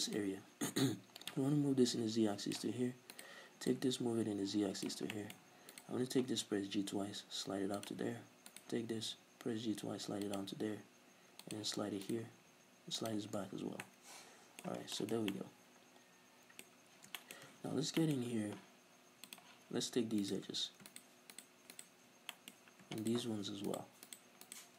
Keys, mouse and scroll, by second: 0.1 right click, 1.3-3.1 drag, 3.1 right click, 3.7-5.1 drag, 5.1-5.7 middle drag, 5.7 right click, 6.2 g, 7.9 click, 8.5 right click, 8.8 g, 11.5 click, 12.1 right click, 12.3 g, 13.1 click, 13.4 Tab, 13.6 scroll down 1, 13.9-14.8 middle drag, 14.8 scroll down 2, 15.0-16.7 shift+middle drag, 16.7-17.2 scroll up 2, 17.2-17.5 shift+middle drag, 17.5 Tab, 18.0-19.3 middle drag, 19.3 click, 20.2 right click, 20.9 shift+right click, 21.3 shift+right click, 21.7 shift+right click, 22.3 middle click, 22.6-23.0 scroll up 2, 23.0 shift+right click, 23.7 shift+right click, 24.0 shift+right click, 24.4 shift+right click.